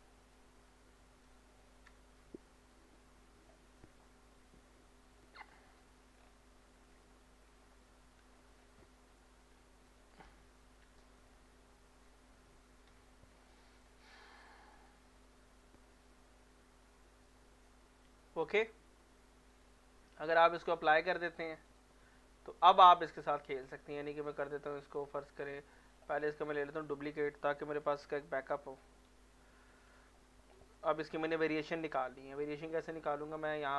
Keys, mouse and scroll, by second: 0.6-3.6 middle drag, 4.4 n, 6.2 scroll down 1, 6.9 scroll up 1, 7.9 middle click, 8.4 scroll down 1, 8.8 middle click, 9.5 scroll up 1, 9.9 click, 11.7 middle click, 12.9 n, 13.4 middle click, 13.9 scroll up 1, 14.3 middle click, 15.3 shift+middle click, 16.1-17.7 middle drag, 19.5 click, 24.3 click, 24.8 click, 25.5 click, 26.2 scroll down 1, 26.5 middle click, 26.9 click, 27.9 shift+d, 29.1 x, 29.8 click, 30.6 click, 30.8 middle click, 31.1 scroll up 1, 31.5 middle click, 31.8 scroll up 1, 32.1 middle click.